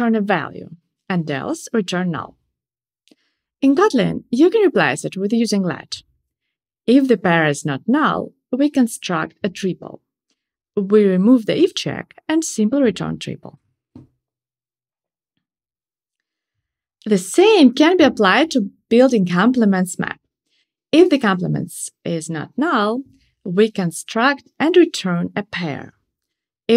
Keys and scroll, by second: 1.3 alt+Up, 3.7 alt+shift+Right, 9.7 shift+super+Up, 15.7 super+v, 21.1 alt+shift+Right.